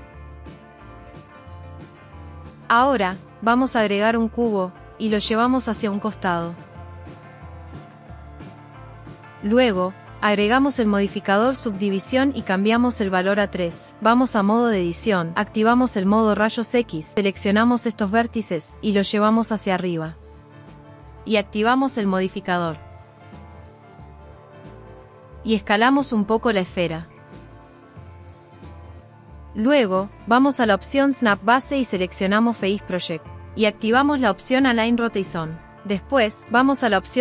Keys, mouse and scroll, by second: 1.2 click, 1.6 click, 3.8 shift+a, 6.8 g, 7.9 click, 9.9-11.5 drag, 12.6 click, 13.6 Tab, 16.2 click, 17.8 g, 18.0 middle click, 19.4 click, 20.2 Tab, 21.6 click, 22.9 w, 25.1 s, 25.9 s, 27.1 click, 28.8 click, 30.7-35.6 drag, 35.6 w, 36.7-37.2 right drag.